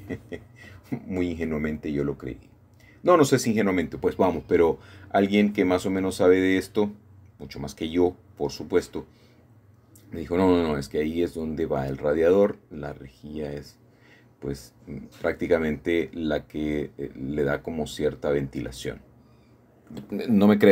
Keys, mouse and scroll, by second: 0.9-2.7 shift+drag, 4.7 shift+click, 6.3 alt+shift+click, 6.8-10.1 alt+shift+middle drag, 10.2 middle click, 10.6 middle click, 11.7-13.5 shift+middle drag, 13.7 middle click, 13.9 middle click, 14.7 middle click, 15.3 shift+middle click, 17.1-18.2 alt+shift+drag.